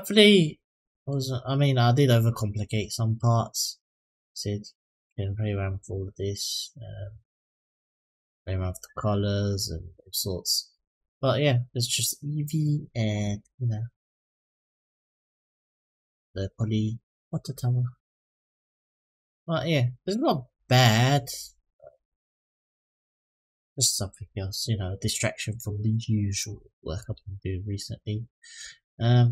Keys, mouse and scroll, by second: 0.0-0.9 middle drag, 1.4-2.0 scroll up 1, 2.0-2.6 middle drag, 3.0 click, 4.5 click, 5.4 click, 26.1-29.3 drag.